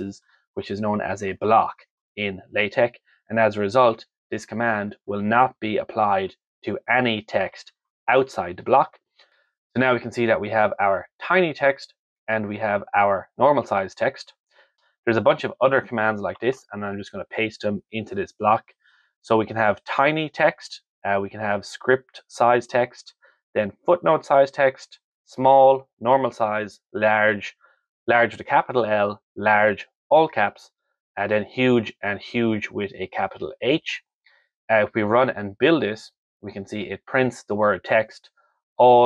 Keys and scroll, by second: 0.0 shift+], 1.6 shift+Left, 3.2 Up, 3.5 Down, 3.7 Right, 4.3 Left, 4.5 shift+Right, 6.1 Down, 6.8 shift+Left, 8.1 F5, 17.4 ctrl+v.